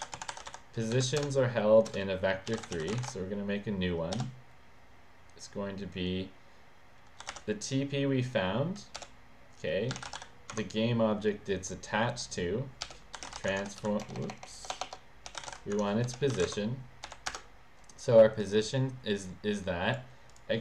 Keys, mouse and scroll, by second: 0.0-4.2 typing, 1.2 Return, 7.0-7.8 typing, 9.0-10.7 typing, 12.6-17.1 typing, 17.3 Return, 18.4 click, 18.5 click, 19.6 click, 20.3 click.